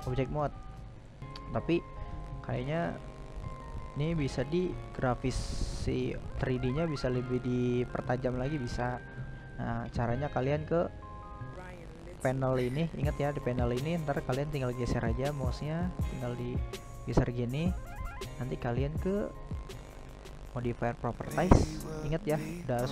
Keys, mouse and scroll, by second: 0.3 right drag, 0.5-8.6 middle drag, 8.6-15.7 drag, 17.6 click.